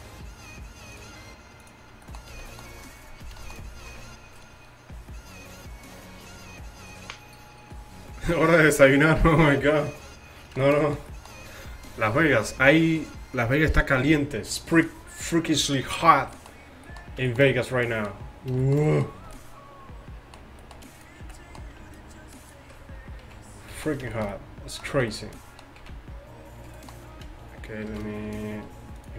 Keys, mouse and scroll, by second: 1.0-2.2 drag, 2.4 a, 12.1 KP_5, 16.4-17.3 middle drag, 21.3-21.6 middle drag, 21.3 z, 22.0-23.0 drag, 22.0-23.8 middle drag, 22.0-23.0 right drag, 23.8 z, 24.9 z, 25.9 z, 27.9 shift+h, 29.0-29.1 right drag.